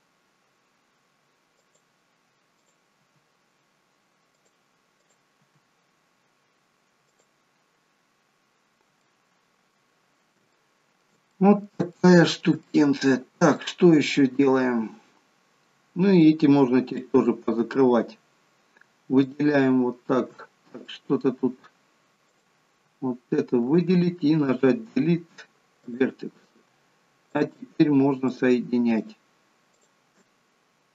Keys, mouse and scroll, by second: 2.5 g, 2.6 click, 3.0 g, 5.1 click, 5.5 g, 8.1 g, 8.4-8.9 scroll down 3, 9.0 middle click, 10.5 shift+middle click, 11.4 middle click, 12.0 shift+middle click, 12.7 middle click, 12.7 scroll up 1, 13.7-14.2 scroll down 1, 15.4 scroll down 2, 15.8-16.8 scroll up 1, 16.8-17.1 scroll up 1, 17.1 middle click, 18.2-18.8 scroll up 2, 19.2 shift+click, 20.5-20.9 scroll up 2, 20.9 middle click, 22.3 click, 24.6 Delete, 27.3 shift+click, 28.3 shift+click, 29.0 shift+click, 29.8 shift+click.